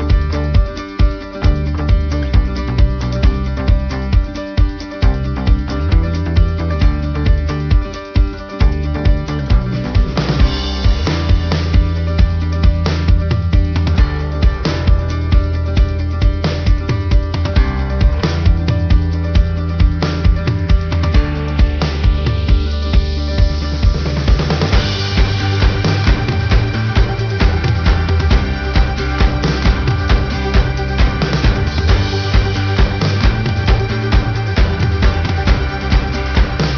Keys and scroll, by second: 1.0 ctrl+-, 2.9 ctrl+=, 8.8 ctrl+alt+shift+n, 32.3 ctrl+alt+shift+n.